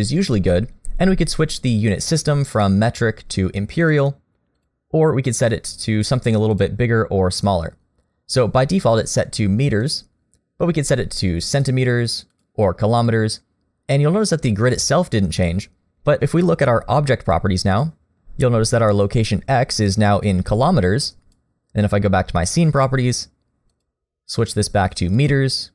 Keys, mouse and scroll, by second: 2.6 click, 4.6 click, 5.5 click, 6.0 click, 9.8 click, 18.1 click, 20.2 click, 22.5 click.